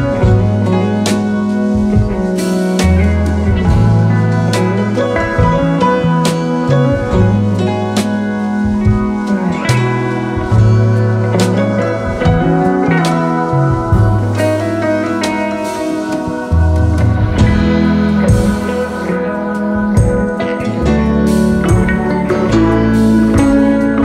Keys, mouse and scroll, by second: 2.7 alt+scroll up 2, 3.9 space, 4.4 space, 9.1 alt+scroll up 1, 11.2 alt+scroll down 1, 11.5 space, 11.9 alt+scroll up 3, 13.1-13.5 alt+scroll up 1, 14.6 alt+scroll down 1, 15.4 ctrl+shift+[, 16.0 alt+scroll down 3, 16.3 space, 17.3 alt+scroll up 1, 17.5 space, 22.4 double click.